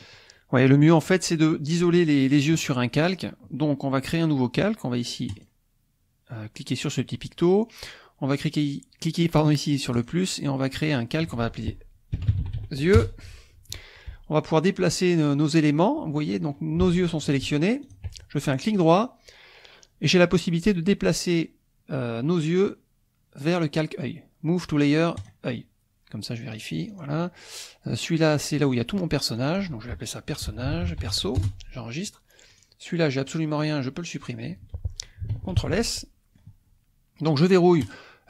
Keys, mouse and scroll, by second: 5.3-7.0 drag, 9.9 click, 10.7-12.1 drag, 12.1 y, 12.3 e, 12.4 u, 12.5 x, 12.9 Return, 16.2 middle click, 17.0 click, 17.9 shift+click, 18.7 right click, 25.2 click, 26.5 click, 26.9 click, 28.3 click, 28.7 click, 29.4-30.5 drag, 30.5-31.0 typing, 31.4 Return, 32.5 click, 33.3 click, 33.6 click, 34.2 click, 35.3 ctrl+s, 35.8-37.4 ctrl+middle drag, 37.8 click.